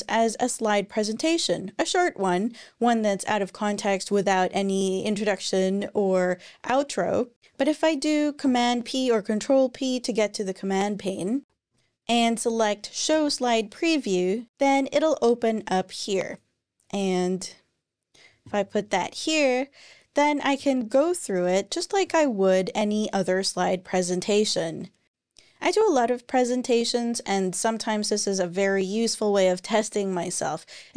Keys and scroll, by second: 8.2 super+p, 11.5 typing, 12.9 Return, 20.4 Tab.